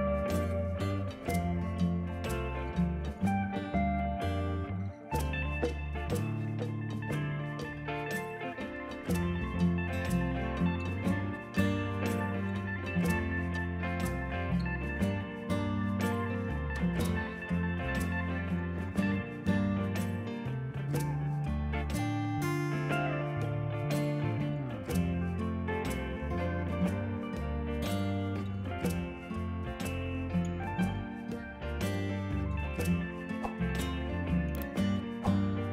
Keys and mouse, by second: 0.5 Delete, 0.8 click, 0.9 Delete, 1.1 click, 2.8 click, 3.6 click, 5.8 KP_4, 5.9 Return, 7.0 click, 8.3 click, 8.7 Delete, 9.7 click, 10.3 click, 11.1 click, 11.3 Delete, 11.6 click, 12.5 KP_2, 12.5 Return, 13.3 click, 14.3 KP_0, 14.4 Return, 15.2 KP_Subtract, 15.4 Return, 16.7 KP_Subtract, 16.9 Return, 17.7 KP_Subtract, 17.8 Return, 20.3 click, 21.2 click, 21.4 right click, 22.2 click, 22.5 click, 27.7 click, 32.9 click, 33.2 x, 33.3 click, 33.9 KP_2, 34.0 Return, 34.5 click, 35.1 right click, 35.3 click.